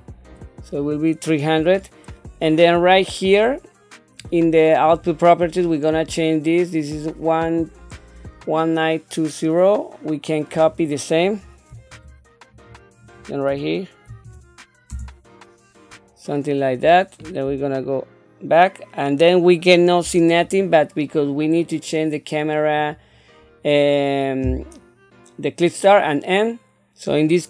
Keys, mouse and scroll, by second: 5.0 click, 10.7-12.8 drag, 13.2-15.1 drag, 22.9 click.